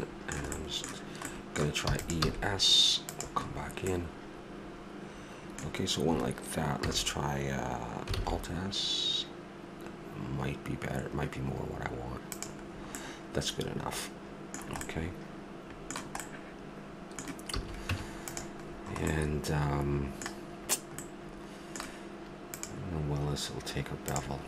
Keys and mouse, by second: 1.9 e, 3.0 s, 6.8 ctrl+z, 8.2 alt+s, 14.7-17.9 middle drag, 17.5 a, 17.9 Tab, 21.1-22.5 middle drag, 23.1-24.1 drag.